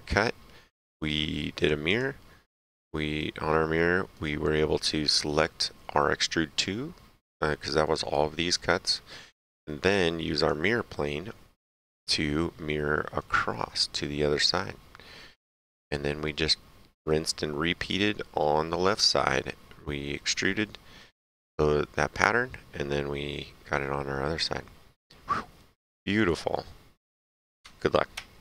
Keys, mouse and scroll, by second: 1.5 click, 2.7 middle click, 3.1 right click, 10.3 click, 11.7 right click, 15.6 click, 16.2 right click, 18.4 right click, 20.6 middle click, 26.1 click.